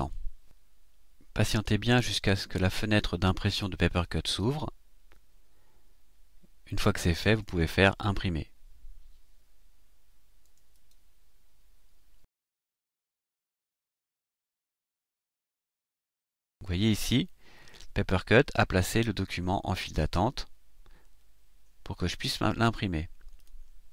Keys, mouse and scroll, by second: 10.7 click, 23.4 click.